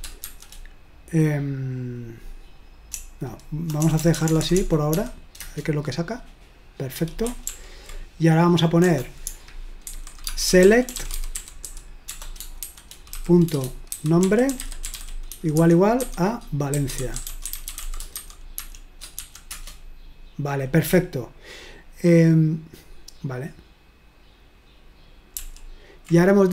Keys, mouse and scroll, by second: 0.0-0.2 typing, 2.9-4.9 typing, 5.4 Return, 7.5 ctrl+p, 8.9-20.0 typing, 25.4 ctrl+p.